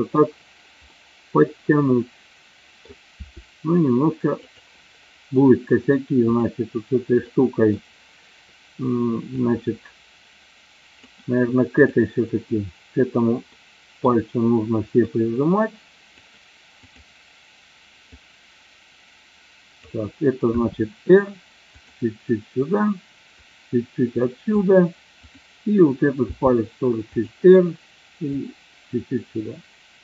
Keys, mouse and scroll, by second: 0.9-2.9 middle drag, 3.2 r, 4.6 click, 6.3 click, 7.3-7.7 middle drag, 9.5-11.2 drag, 11.8 click, 13.6-14.1 middle drag, 15.1-16.3 drag, 18.3-20.0 drag, 20.7 r, 21.8 click, 23.6-24.7 drag, 25.3 click, 26.3 r, 27.2 click, 28.4-30.0 drag.